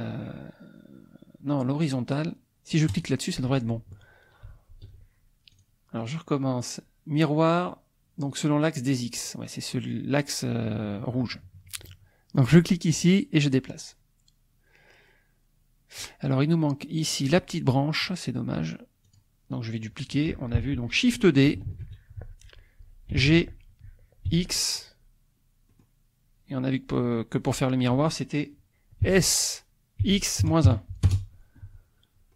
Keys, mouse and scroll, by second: 2.9 click, 4.6 ctrl+z, 5.5 click, 9.1 click, 12.8-16.2 drag, 19.2 click, 21.7 shift+d, 23.1 g, 24.3 x, 25.7 click, 27.0 click, 27.5 click, 29.0 s, 30.0 x, 30.4 KP_Subtract, 30.6 KP_1, 31.1 Return.